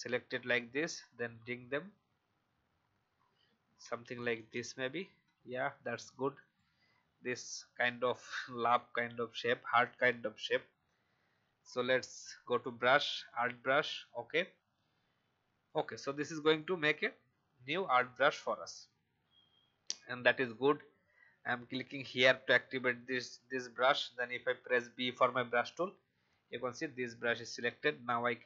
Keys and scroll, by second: 0.7 Right, 2.0 Right, 2.2 Right, 3.4 Left, 3.8 Right, 4.0 Right, 4.2 Right, 4.3 Right, 4.5 Right, 5.3 v, 17.7 Delete, 18.3 alt+Delete, 19.9 alt+Delete, 24.8 b.